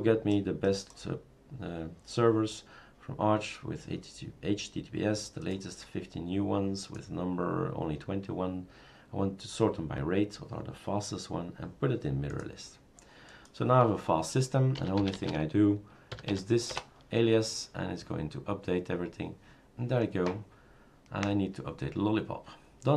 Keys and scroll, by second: 14.6-16.8 typing.